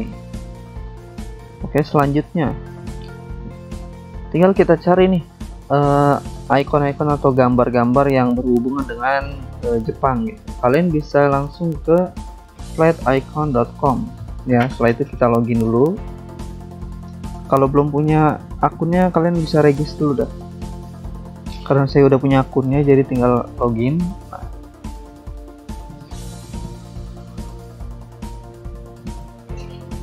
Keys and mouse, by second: 1.7 click, 3.0 click, 4.2 click, 5.1 click, 5.5 click, 5.6 double click, 6.2 ctrl+click, 7.1 click, 7.9 click, 9.4 click, 10.6 click, 13.0 Escape, 13.8 click, 14.7 alt+Tab, 15.4 click, 17.0 click, 17.9 click, 18.9 click, 20.2 click, 21.2 click, 22.2 click, 23.2 alt+Tab, 25.7 click, 26.2 click, 27.0 click, 28.6 click.